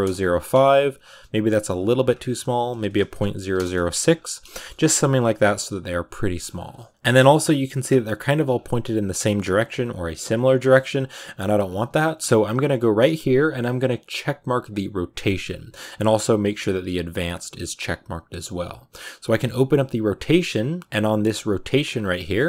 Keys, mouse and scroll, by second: 0.6 scroll down 4, 3.4 click, 4.0-4.4 scroll down 3, 4.4 shift+middle click, 4.7-5.7 scroll up 5, 5.7-6.9 scroll down 1, 6.9 z, 7.0 shift+middle click, 7.2-7.6 scroll up 4, 7.6 scroll down 4, 8.4 scroll down 1, 10.4-15.0 shift+middle drag, 15.0 click.